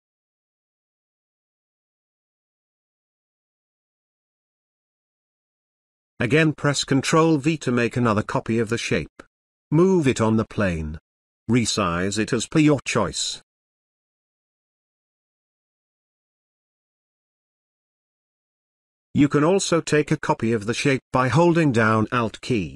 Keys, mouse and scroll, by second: 6.6 ctrl+v, 8.1-10.6 drag, 13.8-14.7 drag, 21.3 click, 21.4-22.7 alt+drag.